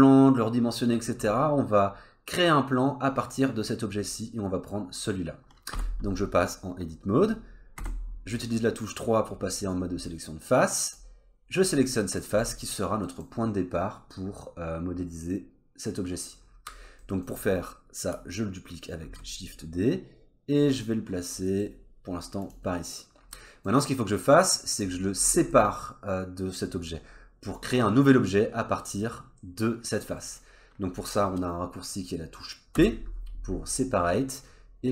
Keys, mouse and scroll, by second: 1.1-4.1 scroll up 3, 5.7 Tab, 7.8 3, 10.9 click, 11.3-11.7 scroll down 2, 11.7 middle click, 12.4 middle click, 13.0 middle click, 16.7-17.0 scroll up 3, 17.0 middle click, 19.0 shift+d, 23.3 middle click, 24.2 click, 24.7 click, 25.2-25.5 scroll down 2, 25.5 middle click, 27.4-28.2 scroll up 1, 30.2 middle click, 32.7 p.